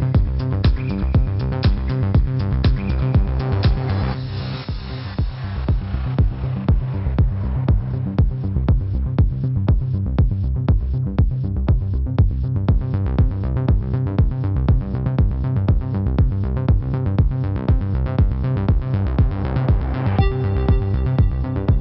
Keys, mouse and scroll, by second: 0.0-0.6 typing, 0.2 ctrl+=, 0.9 click, 1.7 =, 2.1 space, 2.1 click, 2.9 shift+click, 3.7 shift+click, 4.2 shift+click, 5.2 shift+click, 5.7 shift+click, 8.6 shift+click, 9.5 shift+click, 10.0 shift+click, 11.0 click, 13.9 ctrl+-, 14.3 space, 14.5 click, 14.8 space, 15.1 click, 15.2 space, 16.1 click, 16.4 typing, 17.0 click, 20.9-21.8 typing.